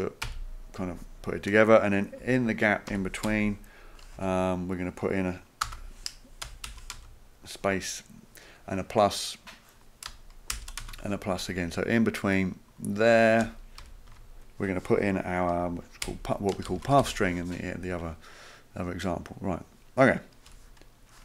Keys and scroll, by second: 0.2 Left, 2.2 Right, 2.9 Up, 3.3 End, 3.4 typing, 4.2 Right, 5.6 space, 6.9 space, 10.8 space, 13.8 Left, 14.1 space, 16.0-17.5 typing, 20.5 Home.